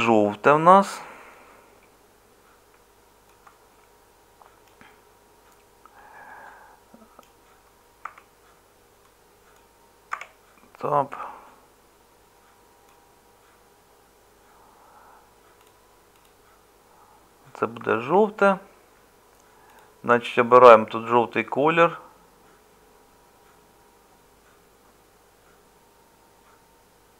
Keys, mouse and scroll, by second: 10.1 Tab, 13.2-17.8 middle drag.